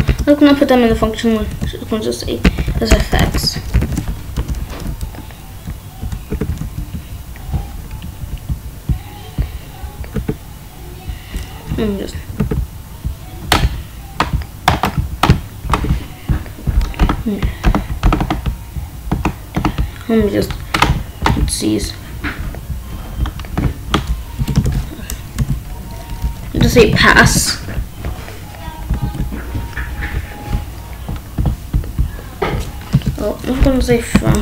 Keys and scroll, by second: 0.0-3.8 typing, 3.4 Right, 4.7 Down, 4.8 Left, 6.3 Tab, 6.4 Down, 6.5 Left, 6.9 Up, 10.1 Tab, 11.7 Up, 12.3 Tab, 15.7 Tab, 21.2 Tab, 24.3-27.2 typing, 24.5 Return, 28.9 ctrl+b, 32.9 Return, 33.5-34.4 typing.